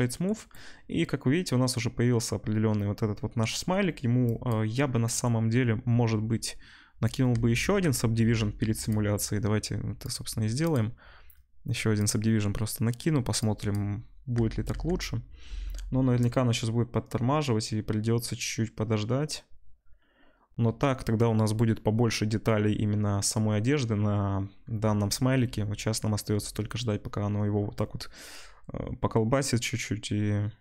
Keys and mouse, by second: 7.3 Tab, 8.0 ctrl+Tab, 8.2 ctrl+s, 10.1-10.7 drag, 13.7-30.6 drag, 14.3 Tab, 14.7 Tab, 15.9 space.